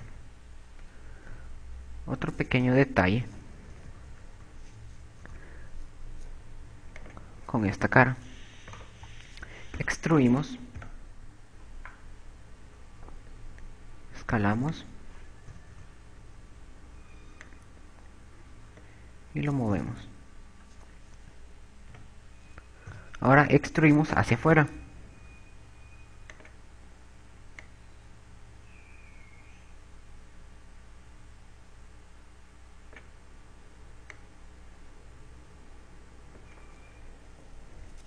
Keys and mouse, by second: 0.7 KP_6, 1.6 a, 2.0 a, 3.1 z, 5.0 KP_4, 5.6 KP_4, 8.0 click, 10.4 right click, 10.9 e, 13.6 s, 16.4 click, 16.7 KP_4, 17.3 KP_4, 21.2 KP_6, 23.2 z, 23.8 KP_6, 26.0 e, 28.0 click, 28.6 click, 35.7 click.